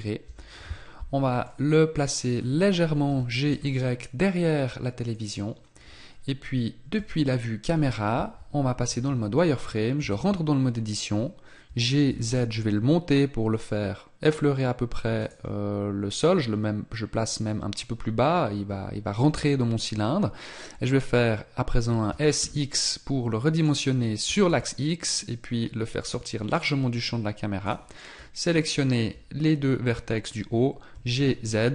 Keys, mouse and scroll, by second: 1.3 scroll up 1, 1.4 middle click, 2.3-3.0 scroll down 1, 3.0 g, 6.9 KP_0, 8.9 z, 9.9 Tab, 21.2-22.1 scroll down 1, 22.1 s, 26.5 click, 27.6 right click, 28.6 shift+right click, 30.9 g.